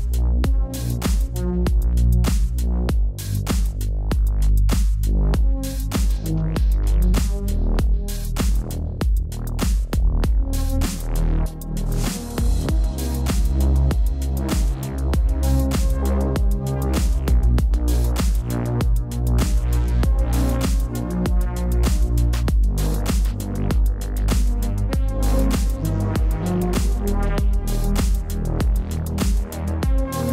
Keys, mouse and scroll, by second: 2.0 click, 2.6 l, 5.8 click, 9.3 ctrl+t, 9.7 click, 10.2 Return, 10.7 click, 12.7-14.1 typing, 13.0 click, 13.5 ctrl+=, 14.0 click, 14.4 click, 15.1 ctrl+-, 15.2 space, 15.3 click, 15.3 space, 15.6 click, 16.5 click, 20.8 click, 22.8 click, 27.0 b.